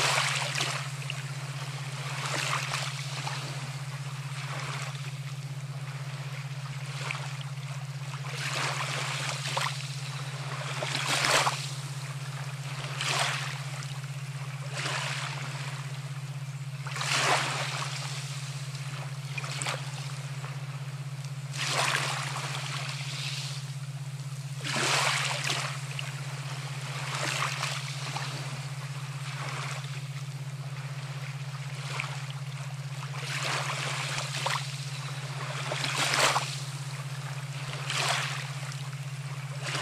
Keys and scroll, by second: 13.0 ctrl+z, 39.0 ctrl+alt+shift+e.